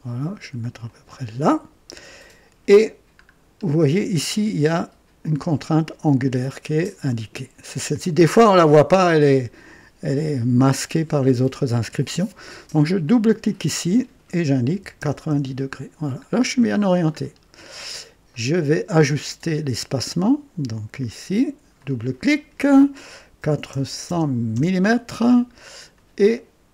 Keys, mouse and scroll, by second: 0.8 ctrl+click, 3.2-3.7 scroll up 3, 5.2-6.9 drag, 13.0 click, 14.7 KP_9, 14.9 KP_0, 15.2 KP_Enter, 16.4-16.9 scroll down 2, 17.1-17.6 scroll up 1, 17.1 typing, 18.3-18.9 right drag, 19.9-20.7 drag, 21.7 click, 22.2 typing, 23.3 typing, 24.5 Return, 25.6-26.0 scroll down 1, 26.3-26.7 right drag.